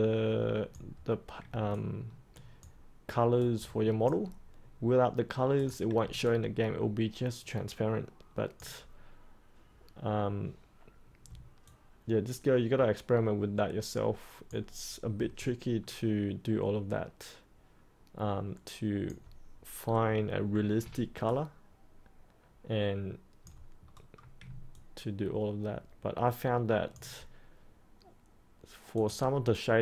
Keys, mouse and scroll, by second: 1.6 alt+click, 3.3 click, 5.5 click, 6.2-8.5 alt+drag, 11.6-14.5 alt+drag, 15.4-19.0 alt+drag, 21.2-23.8 alt+drag, 23.8-24.4 scroll up 1, 24.7-26.9 alt+drag, 28.9-29.8 drag.